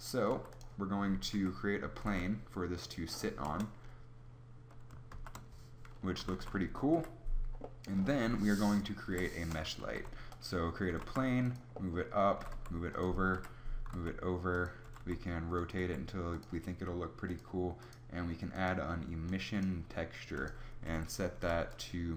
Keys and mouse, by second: 0.2 s, 1.3 KP_3, 1.9 g, 3.4 KP_0, 5.1 shift+z, 6.2 z, 6.2 z, 6.8 KP_7, 9.0 Delete, 9.7 shift+a, 10.8 g, 12.3 g, 13.2 KP_7, 13.7 g, 14.8 r, 15.7 r.